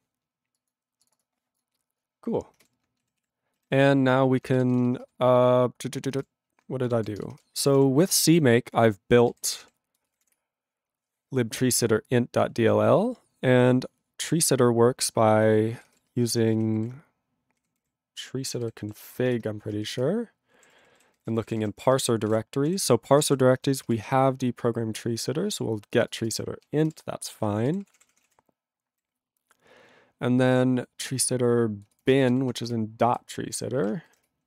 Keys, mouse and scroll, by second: 2.7 ctrl+s, 6.9 ctrl+g, 16.0 ctrl+g, 20.0 ctrl+Return, 20.6 ctrl+=, 21.1 ctrl+n, 21.2 ctrl+e, 21.3 ctrl+n, 21.4 ctrl+e, 21.4 ctrl+n, 21.6 ctrl+e, 21.8 ctrl+space, 21.9 ctrl+a, 22.0 ctrl+n, 22.2 ctrl+g, 22.3 ctrl+e, 22.6 ctrl+p, 22.7 ctrl+e, 23.2 ctrl+space, 23.2 ctrl+a, 26.9 ctrl+a, 27.7 ctrl+g, 27.8 ctrl+p, 27.9 ctrl+e, 28.0 ctrl+p, 28.2 ctrl+a, 28.3 ctrl+n, 28.8 ctrl+n.